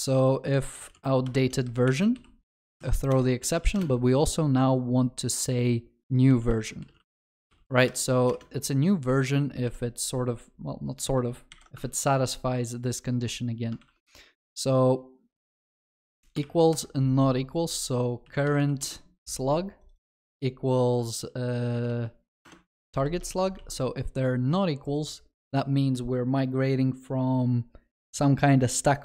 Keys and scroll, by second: 1.2 Return, 2.5 Return, 12.0 ctrl+c, 13.8 ctrl+v, 18.8 Return, 22.9 ctrl+s, 23.2 ctrl+alt+shift+l.